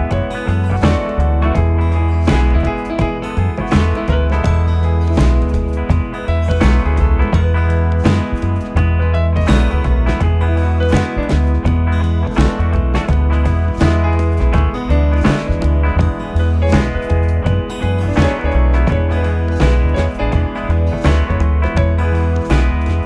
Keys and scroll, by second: 0.8 ], 1.9 4, 6.5 ctrl+d, 6.7 Escape, 13.2 2, 15.7 f, 17.4 4, 19.2 2.